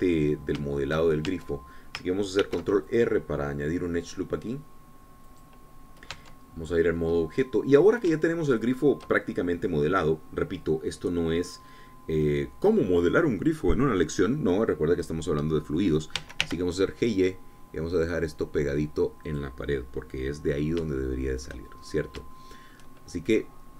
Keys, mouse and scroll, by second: 0.7 click, 1.6 shift+middle click, 1.9 shift+click, 2.5 shift+Tab, 3.6 ctrl+r, 4.2 ctrl+click, 6.4 click, 6.9-7.3 scroll down 2, 7.3 Tab, 8.0 scroll down 2, 8.4-9.7 drag, 9.7 shift+click, 17.3 g, 17.6 y, 20.5-22.0 drag, 22.2 shift+click, 23.0 shift+scroll up 1, 23.5 shift+click.